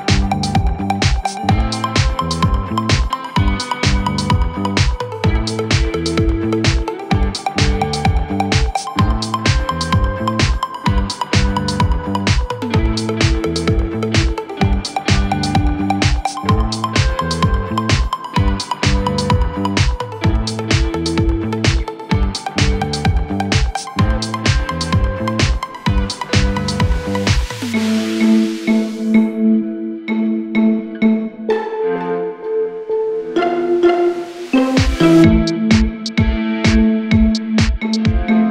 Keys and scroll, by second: 36.9 8, 37.3 Return.